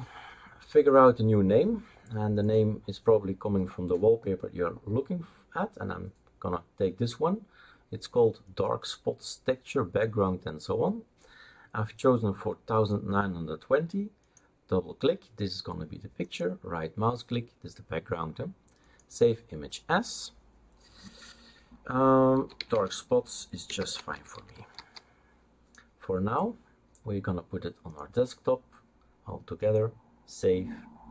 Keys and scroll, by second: 22.1-25.2 typing.